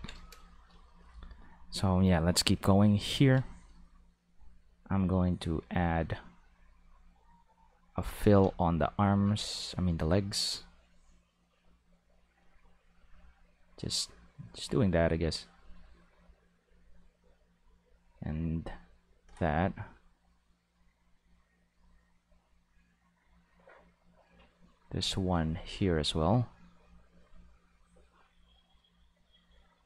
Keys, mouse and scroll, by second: 4.3-7.7 drag, 8.2 ctrl+z, 8.8-19.1 drag, 20.7-29.8 drag.